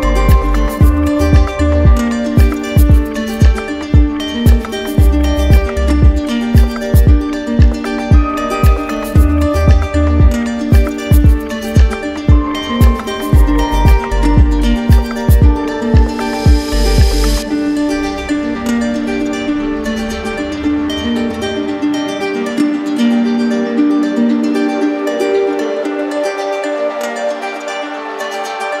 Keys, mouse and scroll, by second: 1.0 click, 2.3 click, 3.6 alt+click, 4.3 alt+click, 4.7 click, 5.3 alt+click, 11.0 alt+click, 13.2 alt+click, 14.9 click, 15.3 shift+click, 16.4 click, 19.2 click, 20.7 alt+click, 22.4 click, 23.1 shift+click, 25.9 alt+click, 27.8 click.